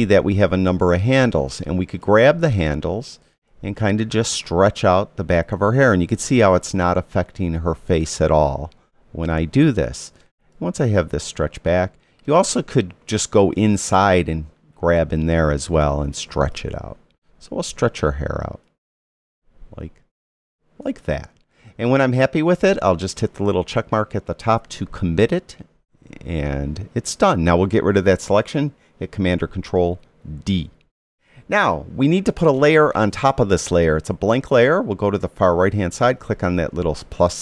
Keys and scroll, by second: 30.3 super+d.